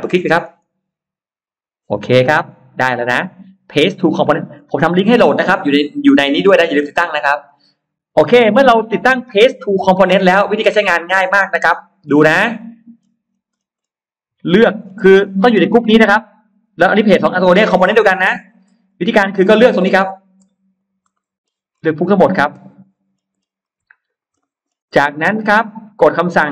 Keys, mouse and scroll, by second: 0.3 click, 0.5 click, 2.2-4.1 drag, 10.2 click, 11.0-11.3 scroll up 1, 11.5 middle click, 11.9-12.2 scroll down 1, 12.5 middle click, 13.1-13.7 scroll up 1, 14.7-15.3 scroll down 3, 16.7-17.0 scroll up 2, 17.3 scroll up 2, 18.1-18.5 scroll down 2, 18.7-19.7 scroll up 6, 19.9 click, 20.7 shift+click, 21.0 middle click, 21.3 scroll down 2, 21.7 scroll up 2, 21.9 shift+click, 22.4 middle click, 22.9-23.5 scroll down 1, 23.9 shift+click, 24.3 middle click, 24.5 scroll down 1, 25.3-25.6 scroll up 2.